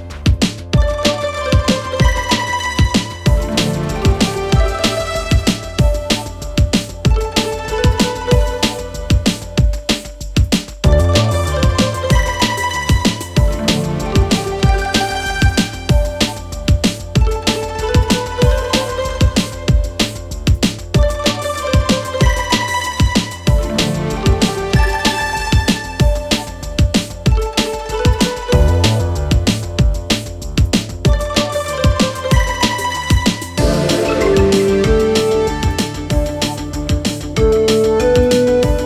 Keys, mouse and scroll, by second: 2.3 space, 2.7-3.1 click, 3.7 space, 3.7 click, 3.9 space, 4.3-4.6 drag, 6.9 space, 7.0 click, 7.3 space, 7.4 click, 8.3 space, 8.4 click, 8.6 space, 8.9 click, 9.0 space, 9.1 click, 9.3 space, 9.5-10.3 click, 11.1 Delete, 12.0 ctrl+z, 12.4-12.9 click, 13.0 ctrl+z, 13.3-13.8 click, 13.8 ctrl+z, 14.2-15.0 drag, 16.1 space, 16.2 click, 16.4 space, 16.7-17.0 click, 17.6 space, 17.7 click, 17.9 space, 18.3-19.3 drag, 20.2-22.4 typing, 20.3-20.6 click, 20.8-21.8 click, 22.1-22.5 click, 22.7-23.0 drag, 23.9 space, 24.0 click, 24.2 space, 24.4-24.8 click, 25.2 space, 26.1 click, 26.7 space, 26.8 click, 27.0 space, 27.3-28.2 click, 28.5-31.9 typing, 28.7 click, 29.1-29.9 click, 29.6 click, 30.1-30.9 click, 30.6 click, 30.9-31.9 click, 31.7 click, 32.1-32.4 click, 33.1-33.7 click, 33.3-35.0 typing, 33.4 click, 33.9 click, 34.1 click, 34.6 click, 34.9 click, 35.3-35.9 drag, 37.0 space, 37.1 click, 37.4 space, 37.5-37.8 drag.